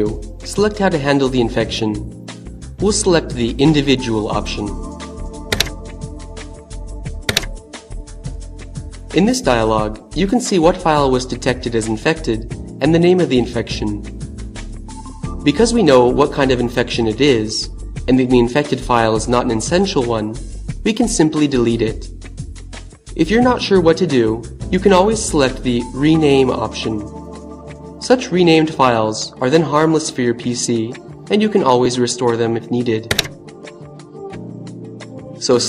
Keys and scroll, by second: 4.0 Down, 6.4 Return, 31.3 Down, 35.2 Down.